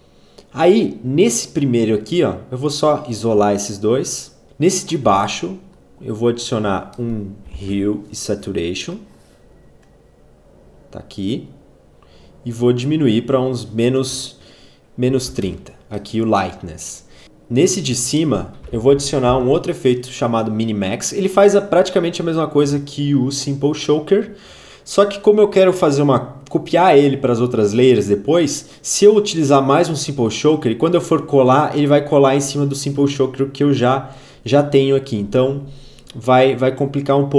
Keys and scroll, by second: 7.0-8.0 typing, 13.6-15.5 typing, 18.4-19.8 typing.